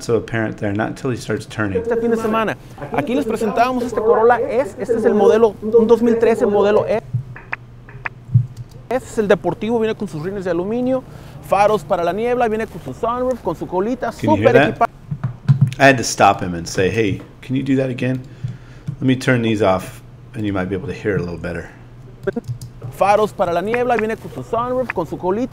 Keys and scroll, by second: 1.3 space, 22.5 space.